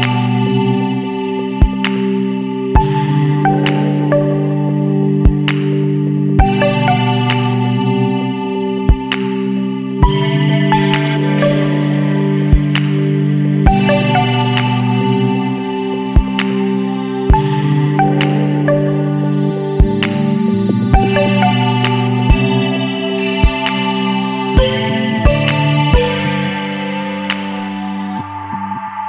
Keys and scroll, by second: 9.9 ctrl+t, 23.6 ctrl+j.